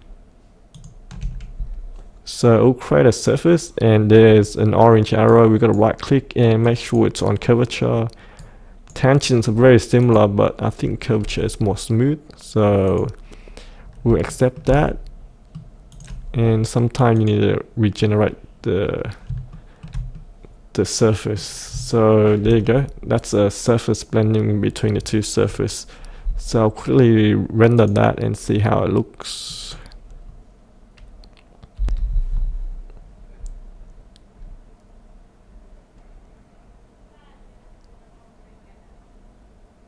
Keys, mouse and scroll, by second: 4.3 scroll down 1, 5.3-10.0 right drag, 10.0 click, 11.2-12.8 scroll up 1, 12.8 click, 13.8 scroll up 1, 14.3 shift+middle click, 14.7 middle click, 15.9 click, 19.5 shift+middle click, 20.2 middle click, 22.0 shift+middle click, 27.7 click, 31.7 F8.